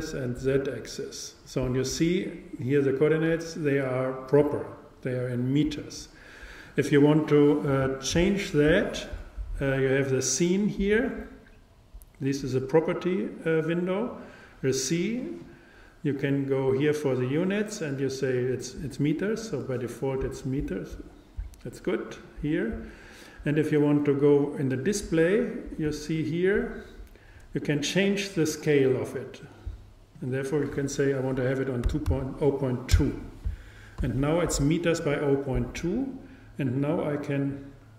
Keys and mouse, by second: 0.3-2.1 drag, 15.4-18.1 drag, 22.1-24.0 drag, 24.4-26.4 drag, 30.2-32.1 drag, 36.8-37.9 drag.